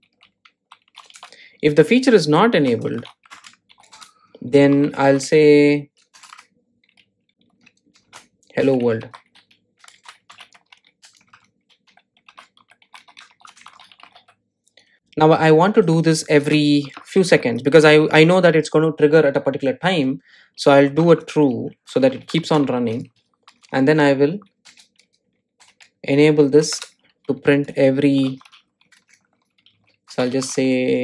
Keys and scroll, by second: 7.3 Delete, 7.8 Tab, 9.7 shift+Return, 9.9 super+z.